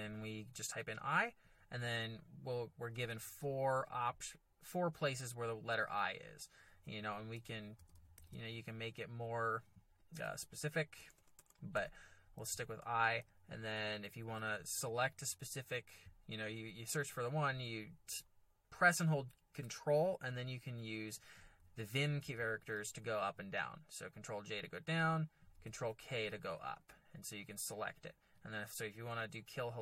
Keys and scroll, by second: 7.3-8.8 typing, 11.0 BackSpace, 11.1 BackSpace, 11.3 BackSpace, 11.7 BackSpace, 20.6 ctrl+j, 21.0 ctrl+j, 21.5 ctrl+j, 22.2 ctrl+k, 22.6 ctrl+k, 27.7 ctrl+j.